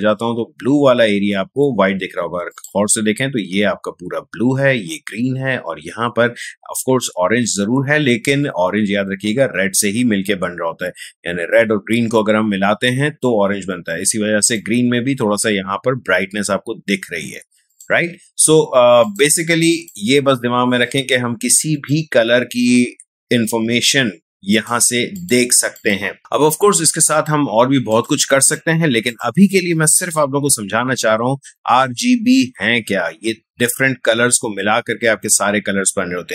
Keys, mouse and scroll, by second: 2.5 click, 14.4 click, 17.7 click, 24.5 click, 27.1 click.